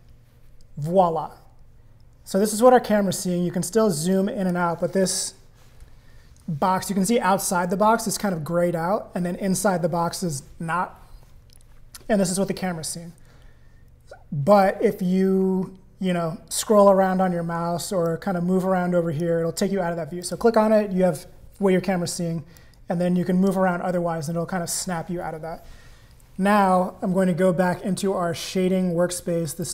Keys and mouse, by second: 3.1-4.6 drag, 18.1-19.2 drag, 20.2 click, 22.5-23.5 drag, 24.3 click.